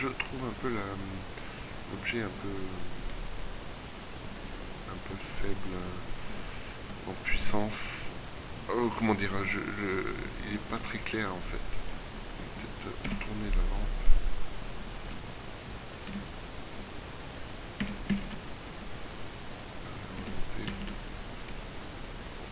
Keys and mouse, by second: 0.0 Escape, 3.1 Escape, 12.3 middle click, 12.9 KP_7, 15.1 z, 16.1 r, 17.3 r, 20.1 g.